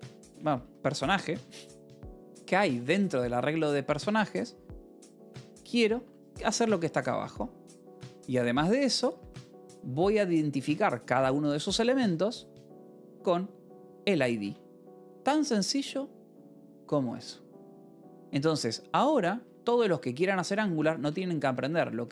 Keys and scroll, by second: 0.0-3.5 typing, 4.1 Escape, 4.7-8.7 typing, 10.3 h, 12.7-15.4 typing, 19.1 k, 20.4-22.1 typing.